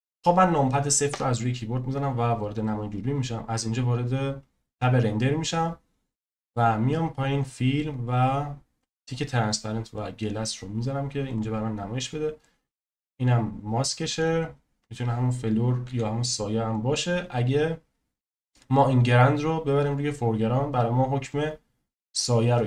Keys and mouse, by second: 1.1 KP_0, 7.4 click, 9.1 click, 9.9 click, 15.8 s, 16.7 click, 21.5 click.